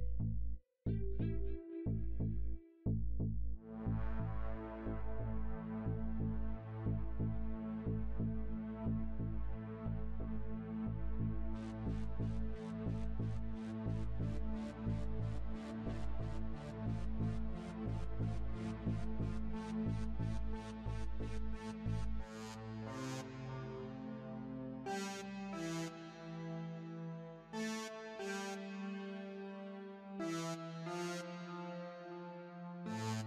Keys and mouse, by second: 2.8-4.6 drag, 5.3-7.2 drag, 12.4 shift+d, 16.4-18.3 drag, 19.6-21.7 drag, 24.3-26.1 drag, 26.9-28.8 drag, 29.4 click, 32.4 shift+d.